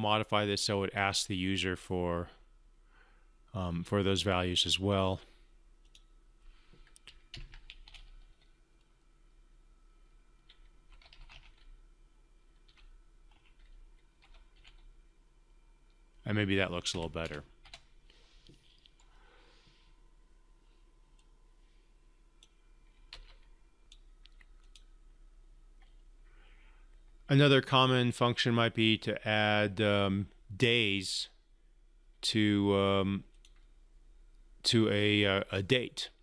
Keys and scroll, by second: 7.3 ctrl+F5, 23.3 ctrl+c.